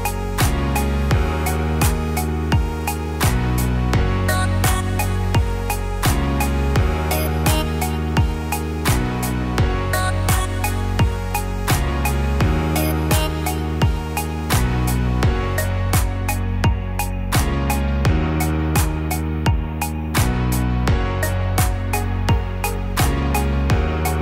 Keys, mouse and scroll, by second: 1.4 ctrl+z, 3.1 Tab, 3.5 click, 4.0 click, 4.5 Tab, 5.2 click, 6.3 g, 8.2 middle click, 9.0-9.6 scroll down 3, 9.4 middle click, 15.7 z, 17.9 KP_1, 18.9 click, 19.2 click, 20.0 click, 21.9 middle click, 24.1 g.